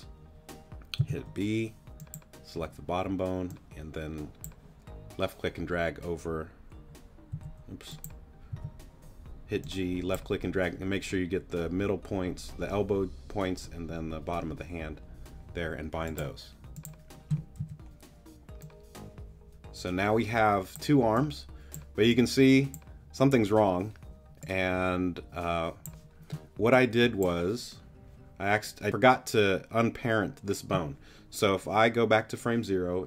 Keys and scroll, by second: 1.0 b, 7.3 b, 8.5 g, 17.6 z.